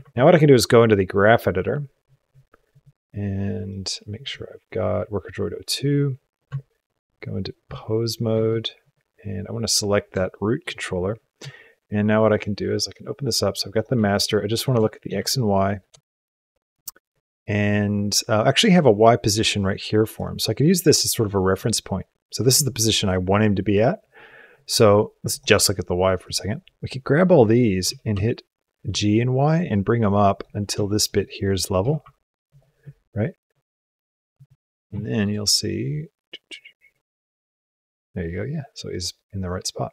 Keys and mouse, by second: 2.5 click, 3.5 click, 6.3 Tab, 8.2 a, 8.6 click, 10.1 shift+click, 11.4 shift+click, 12.1 click, 13.0 click, 13.5 click, 14.8 shift+click, 15.1 ctrl+click, 15.9 shift+click, 18.4 click, 21.3 click, 25.1 click, 26.0 click, 26.2-27.1 drag, 27.7 g, 30.6 shift+click, 31.6 g, 33.0-34.2 drag, 34.9 shift+middle click, 35.5-39.9 drag.